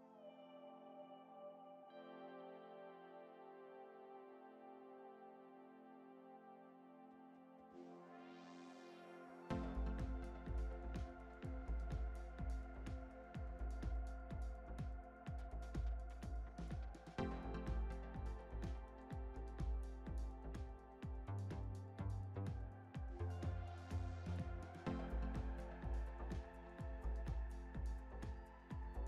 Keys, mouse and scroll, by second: 0.9-1.8 scroll up 2, 1.8 click, 1.9 click, 2.7 s, 7.5 middle click, 8.4 click, 8.6 click, 9.2 s, 14.5-15.6 shift+middle drag, 15.6 click, 16.9 click, 17.1 click, 18.0 ctrl+b, 20.6 click, 20.7 click, 21.7 s, 25.0-25.4 scroll down 3, 25.4 Tab, 25.7-26.0 drag, 26.0-26.5 scroll down 4, 26.5-28.4 middle drag, 28.4 scroll down 2.